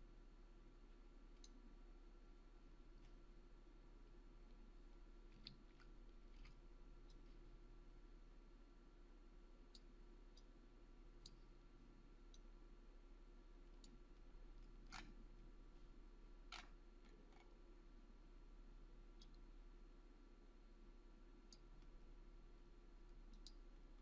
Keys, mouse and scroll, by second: 5.3 w, 5.7 e, 6.3 r, 7.1-9.9 drag, 14.8 scroll up 1, 17.0-17.6 scroll down 1, 19.2-21.7 drag.